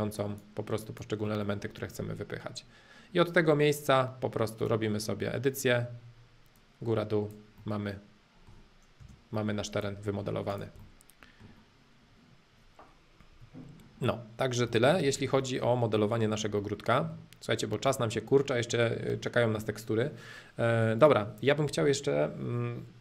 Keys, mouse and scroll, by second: 1.4-3.4 middle drag, 4.6-6.6 drag, 7.6-9.0 middle drag, 9.0 space, 9.3 middle click, 9.7 click, 10.0 middle click, 10.5 click, 10.8-12.8 middle drag, 14.8 shift+middle click, 15.7-18.7 shift+middle drag, 21.0-23.0 drag.